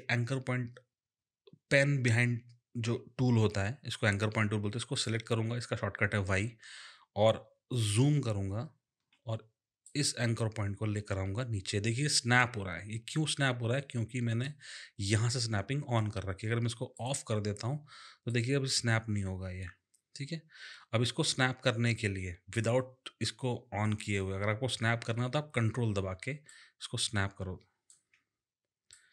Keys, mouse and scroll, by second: 4.9 click, 7.8 click, 8.2-9.2 alt+scroll up 2, 9.8 click, 16.9 click, 18.3 click, 26.5 ctrl+click, 26.7 ctrl+click, 28.9 click.